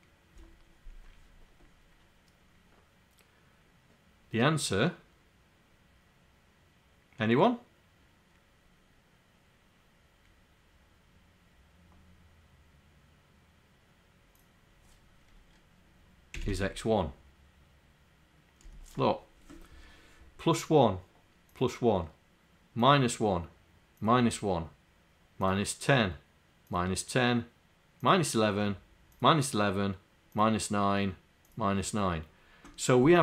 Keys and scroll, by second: 16.5 1.